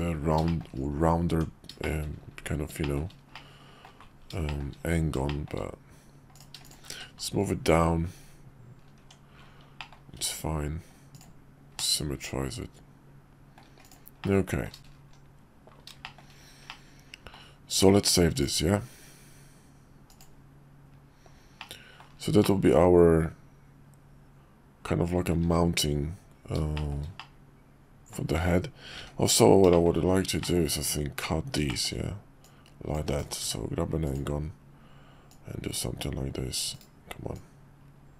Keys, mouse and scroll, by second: 0.5 shift+middle click, 1.3 Tab, 1.8 shift+middle click, 2.8 shift+middle click, 3.3 middle click, 4.4 shift+click, 5.3 shift+click, 6.3 shift+click, 7.0 1, 9.0 Tab, 9.8 middle click, 10.1 alt+x, 11.8-13.5 middle drag, 13.8 click, 14.2-14.7 middle drag, 16.0 shift+middle click, 16.7-17.3 middle drag, 18.4-20.3 drag, 21.6-22.0 middle drag, 22.4-25.3 middle drag, 26.7 click, 27.2-28.1 middle drag, 28.3 `, 28.9 `, 29.7 shift+middle click, 30.4 shift+middle click, 31.7 shift+middle click, 32.4-33.3 drag, 33.4 d, 35.3-36.6 drag, 37.3-38.1 drag.